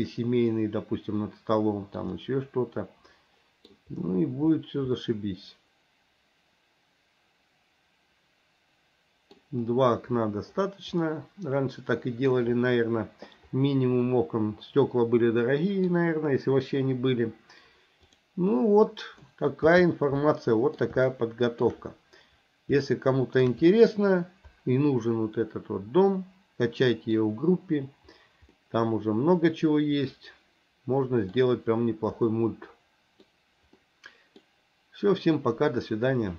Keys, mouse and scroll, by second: 0.5-2.0 middle drag, 2.2-3.8 middle drag, 5.0-9.4 middle drag, 11.1-12.3 middle drag, 14.1-16.0 middle drag, 18.5-19.2 middle drag, 19.6 n, 20.2-20.8 middle drag, 21.1-21.6 shift+middle drag, 22.9 shift+middle click, 23.7-27.2 middle drag, 28.6-31.3 middle drag, 32.3-33.3 middle drag, 33.8 middle click.